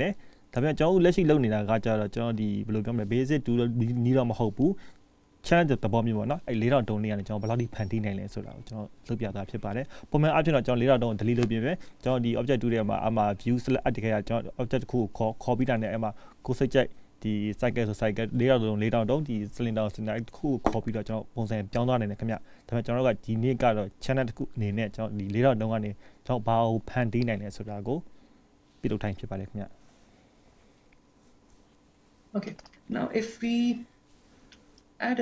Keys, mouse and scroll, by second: 32.7 click.